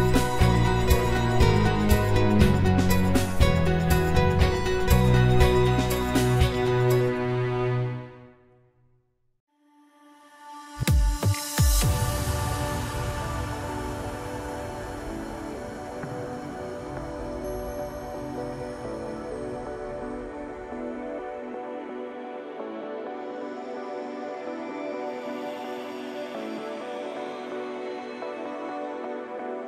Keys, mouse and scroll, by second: 2.2 s, 3.4 Tab, 4.0-4.8 middle drag, 4.8-5.4 scroll up 2, 5.4 s, 6.6 scroll down 3, 6.9-8.1 middle drag, 9.0-9.5 drag, 9.5-10.7 scroll up 1, 10.7-13.7 drag, 15.2 click, 15.8-17.0 middle drag, 17.0-17.5 drag, 17.5-19.7 right drag, 19.7-21.0 middle drag, 21.0 click, 22.3-23.2 drag, 23.2-23.9 scroll down 1, 23.9 click, 25.1-28.2 middle drag, 28.3 middle click, 29.1 KP_Divide.